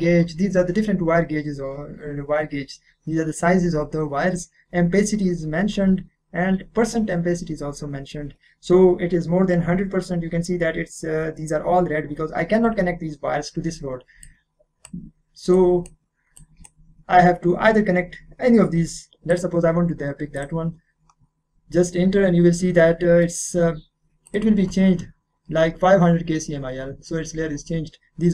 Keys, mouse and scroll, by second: 1.1-1.9 scroll down 1, 1.9 scroll up 1, 14.2-17.6 drag, 17.6-19.1 scroll down 1, 19.3 click, 22.2-22.8 scroll up 1, 22.8-25.8 middle drag, 24.2 click.